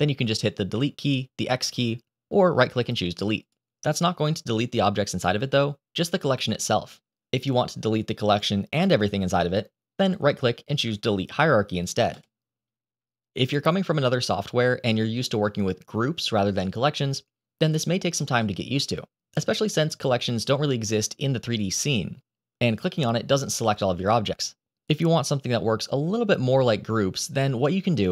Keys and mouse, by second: 0.7 click, 7.2 ctrl+z, 9.9-12.1 drag, 20.2 click, 23.3 click, 23.8 click.